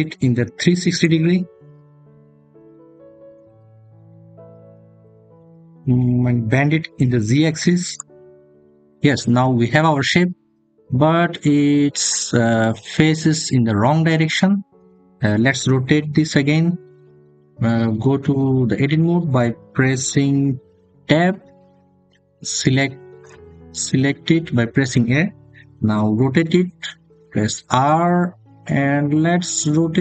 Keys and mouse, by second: 0.8-4.1 drag, 8.6 click, 18.4 Tab, 21.9 a, 27.3 r.